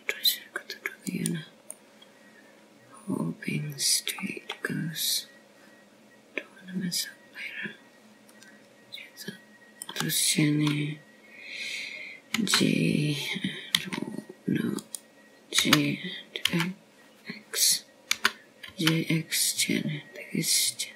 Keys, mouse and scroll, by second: 0.6 e, 4.6 middle click, 8.0 middle click, 15.2 g, 17.8 right click.